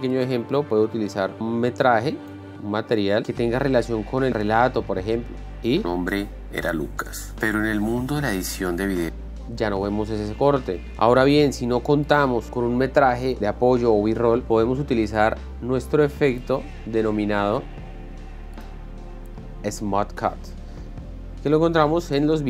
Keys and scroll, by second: 6.2 space, 11.9 ctrl+x.